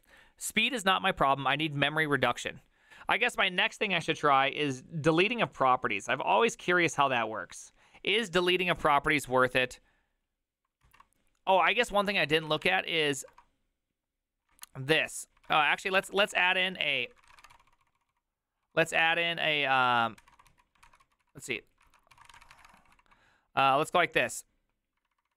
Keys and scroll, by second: 12.3 alt+{, 12.3 ctrl+c, 12.4 ctrl+c, 12.5 ctrl+c, 12.7 Up, 13.3 BackSpace, 14.5 Return, 15.5 ctrl+c, 15.8 ctrl+a, 16.0-23.5 typing, 16.1 ctrl+c, 16.2 ctrl+:, 16.3 Return, 16.6 ctrl+u, 21.9 ctrl+c, 25.0-25.3 typing.